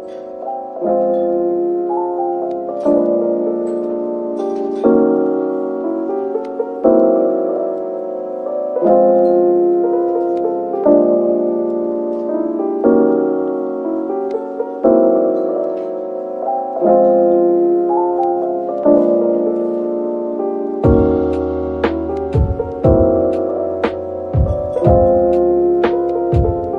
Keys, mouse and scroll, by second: 3.7-7.1 scroll down 1, 9.8 double click, 10.2-12.8 scroll down 1, 13.4 double click, 14.3 ctrl+z, 14.6 ctrl+z, 14.9 ctrl+z, 15.2 ctrl+z, 15.8 scroll down 1, 18.4 double click, 19.1 scroll down 1.